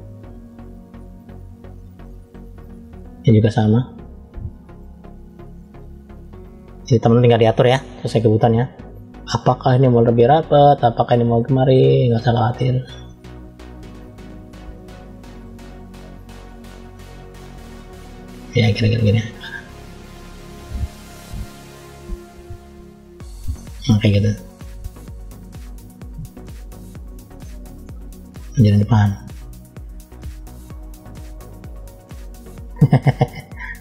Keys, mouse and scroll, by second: 0.4 click, 1.3 click, 1.9 click, 3.2 click, 3.8 click, 4.2 click, 4.9 click, 5.5 click, 6.1 click, 7.5 shift+middle click, 8.3 scroll up 1, 9.1 click, 10.1 click, 10.8 click, 11.3 click, 12.2 click, 12.6 click, 13.6 click, 14.1 click, 15.6 click, 17.2 click, 18.4 click, 19.1 click, 19.6 click, 20.3 click, 21.0 click, 22.3 click, 22.9 click, 23.4 middle click, 24.4 middle click, 25.2 click, 25.8 click, 26.4 click, 26.9 click, 27.3 middle click, 28.2 click, 29.0 click, 29.8 click, 31.1 click, 31.6 click, 32.1 middle click, 33.1 middle click.